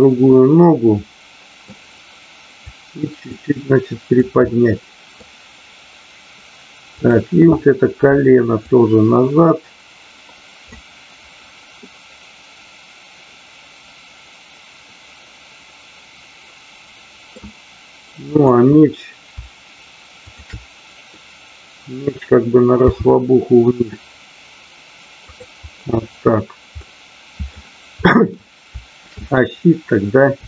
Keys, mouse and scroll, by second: 0.3-1.7 middle drag, 2.7-4.1 drag, 4.4 middle click, 6.9 click, 8.5-10.8 drag, 11.8-17.3 middle drag, 18.3 click, 21.0-22.3 middle drag, 22.8 r, 25.3 click, 26.7-27.4 middle drag, 28.0 middle drag, 29.3-30.0 drag.